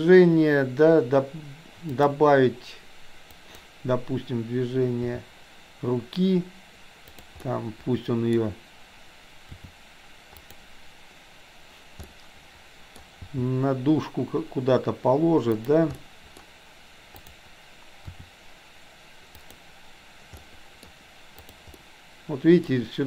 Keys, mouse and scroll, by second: 1.9 click, 3.3 click, 4.9 g, 7.4-8.4 middle drag, 9.5 r, 12.0 middle click, 13.3 g, 16.0-16.4 middle drag, 17.2 click, 18.0 r, 20.4 middle click, 21.4 click, 21.7-22.7 middle drag.